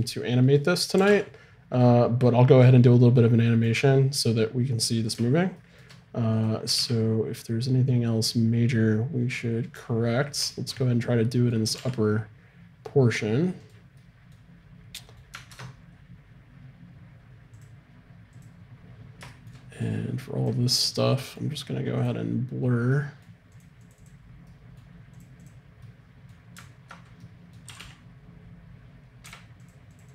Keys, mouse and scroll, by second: 1.0 r, 6.4-8.2 drag, 6.4-7.7 right drag, 6.7 r, 10.2 middle click, 11.7 middle click, 11.7 r, 15.1 click, 15.6 ctrl+Tab, 17.5-19.4 drag, 19.4 middle click, 19.9-27.3 drag, 27.3 middle click, 27.7 r.